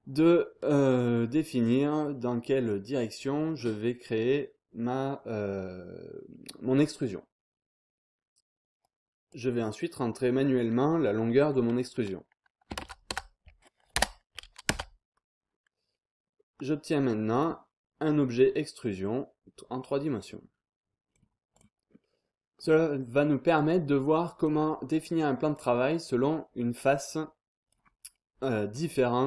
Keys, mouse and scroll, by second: 1.3 scroll down 1, 1.4-1.9 scroll up 1, 8.8 click, 12.7 KP_3, 12.7 KP_0, 13.1 KP_0, 13.9 BackSpace, 14.7 Return, 15.7 scroll down 2, 15.9-16.5 scroll up 2, 16.5 click, 18.8-21.9 drag, 21.9 scroll down 2, 22.1-22.6 scroll up 2, 23.5 click, 25.5-27.8 drag, 27.8 scroll down 1, 28.0-28.7 scroll up 2, 28.7-29.2 drag.